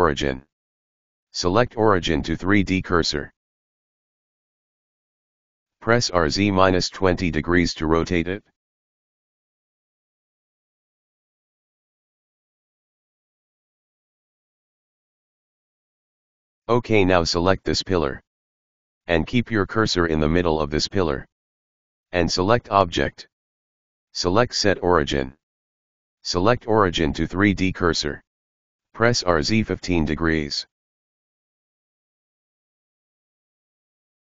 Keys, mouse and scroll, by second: 5.1 r, 10.5-10.9 scroll down 3, 10.9-13.9 middle drag, 16.1-17.6 middle drag, 17.6 click, 20.0 click, 23.5-26.8 drag, 26.8-27.3 scroll up 1, 27.3-28.7 scroll up 1, 28.7 r, 33.0 scroll down 1, 33.1-33.7 middle drag, 33.7 KP_1.